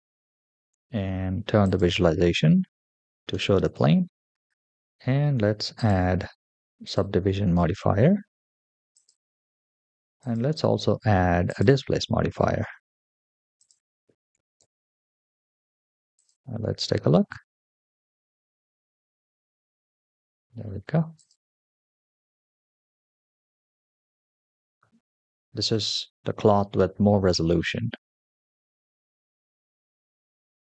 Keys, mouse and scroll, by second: 1.6 click, 3.1-3.5 middle drag, 3.9-4.5 scroll down 2, 5.6-7.1 drag, 7.3-8.7 scroll down 3, 8.8 click, 10.1-11.7 drag, 12.1-13.2 scroll down 5, 13.4-14.7 drag, 16.0 click, 16.9 space, 21.1 click.